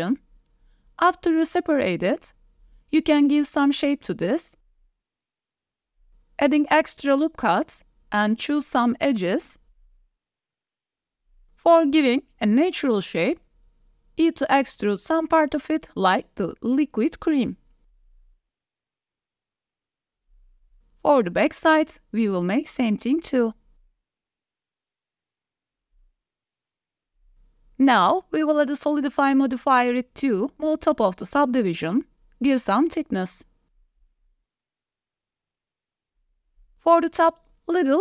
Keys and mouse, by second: 0.1-1.2 drag, 1.4 shift+middle drag, 1.7 click, 1.9-2.4 drag, 2.8 Tab, 3.0 a, 3.5 alt+s, 4.8 click, 5.7 click, 6.3 middle click, 6.9 ctrl+r, 8.3 middle click, 9.4 middle click, 9.8 2, 10.2 click, 11.3 KP_1, 12.3 g, 14.4 click, 14.7 g, 16.0 click, 16.5 g, 16.6 y, 17.3 click, 18.0 e, 18.6 s, 19.1 1, 19.3 g, 19.6 click, 20.0 shift+click, 20.6 e, 21.0 s, 21.5 click, 21.6 g, 21.6 y, 21.7 Tab, 21.7 click, 21.9 Tab, 21.9 click, 22.3 click, 22.4 ctrl+KP_1, 22.6 e, 23.7-27.3 typing, 24.6 Tab, 24.6 click, 24.7 Tab, 24.8 click, 25.4 click, 25.6 Tab, 25.9 ctrl+r, 26.4 click, 26.7 click, 27.0 click, 27.5 click, 27.6 Tab, 27.9 shift+drag, 28.4-29.3 drag, 30.1-30.7 drag, 31.5 shift+middle drag, 31.9 middle click, 32.8-35.0 middle drag, 35.2 middle click, 35.4 Tab, 35.4 click, 36.1 click, 36.4 alt+shift+click, 36.6 s.